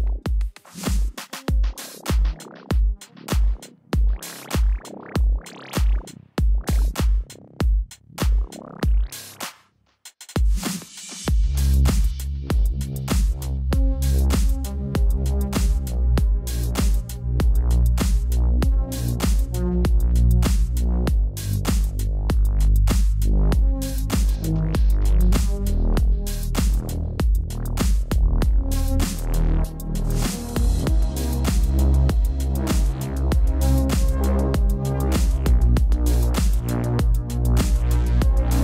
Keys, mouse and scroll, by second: 0.2 alt+shift+click, 0.7 alt+click, 1.2 Return, 1.5 ctrl+t, 1.9 click, 2.2 shift+click, 3.1 alt+click, 3.7 Return, 4.0 click, 4.1 ctrl+a, 4.2-5.0 typing, 4.3 click, 5.3 Escape, 5.5 shift+click, 5.7 Tab, 7.6 click, 8.5 Return, 9.5 right click, 12.3 click, 14.2 ctrl+t, 14.9 click, 16.1 click, 16.5 click, 17.1 Return, 17.8 click, 18.7 right click, 19.8 click, 21.5 click, 30.9 click, 33.0 click, 38.0 click.